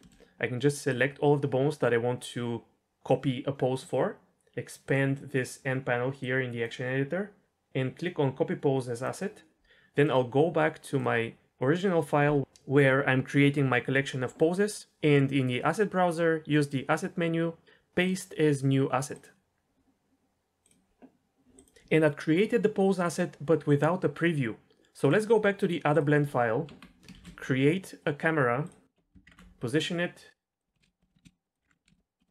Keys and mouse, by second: 0.0 shift+middle click, 1.0-3.7 drag, 4.8 click, 6.2-9.1 drag, 16.8-19.3 drag, 20.1 ctrl+s, 30.8 ctrl+space, 30.9-31.2 shift+drag, 31.4 click, 31.8 ctrl+space, 31.8 KP_0.